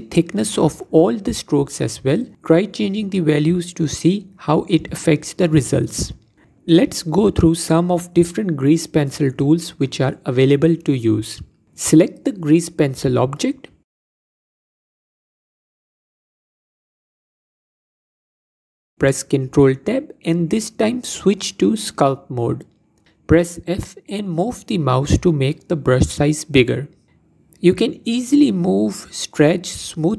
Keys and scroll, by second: 18.5 ctrl+Tab, 25.6 f.